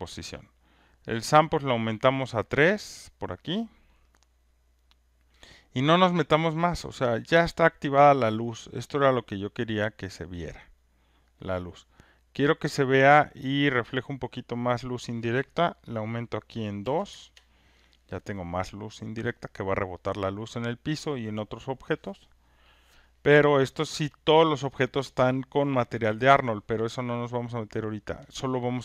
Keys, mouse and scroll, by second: 1.4 click, 1.9 click, 2.5 click, 3.1 click, 11.2 click, 13.3 click, 14.7 click, 16.8 2, 17.1 Return.